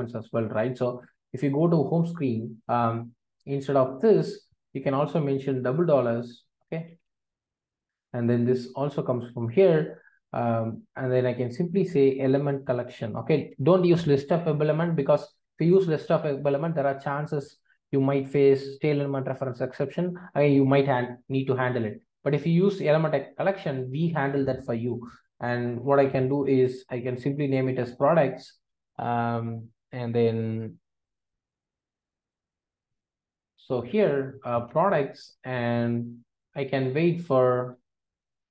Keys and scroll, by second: 8.0 alt+Return, 13.4 Return, 35.3 Return.